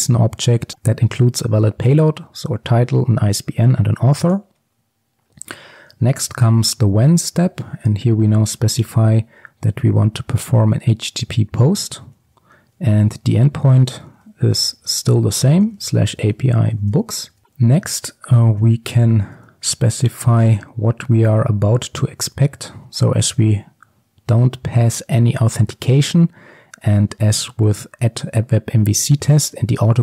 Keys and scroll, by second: 7.2 Return, 8.0 Tab, 11.1 Return, 19.4 Return, 22.3 Tab.